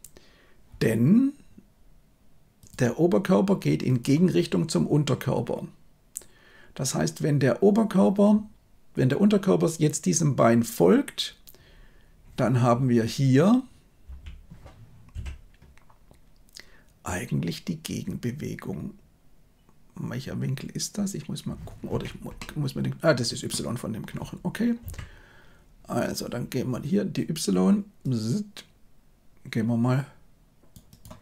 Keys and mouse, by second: 2.5-4.0 drag, 22.3-23.4 middle drag, 24.7 KP_7, 27.9-30.6 drag, 31.0-31.2 drag.